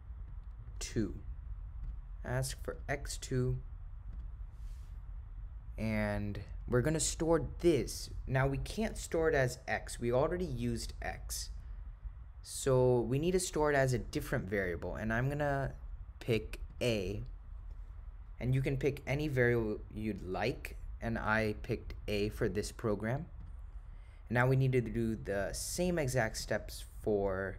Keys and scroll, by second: 0.0-2.8 typing, 7.3 ,, 23.5 Return, 26.5 Right.